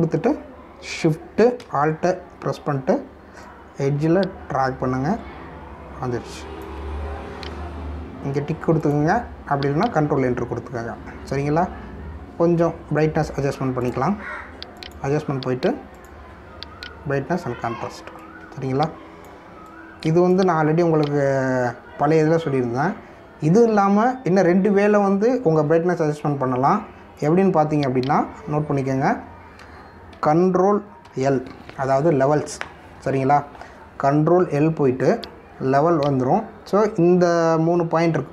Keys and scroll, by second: 32.0 ctrl+l.